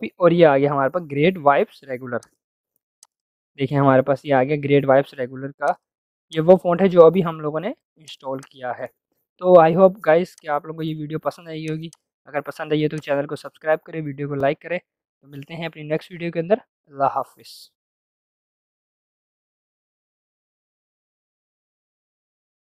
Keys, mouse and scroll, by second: 2.1 click, 3.8-4.8 typing, 5.6-12.9 drag.